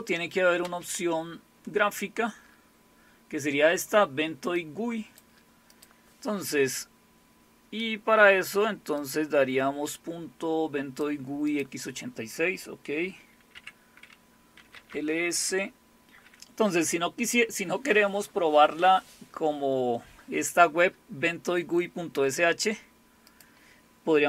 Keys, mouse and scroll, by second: 0.6 space, 4.6 click, 5.7 click, 9.0-11.1 drag, 11.5 click, 13.5-15.2 typing, 23.3 click.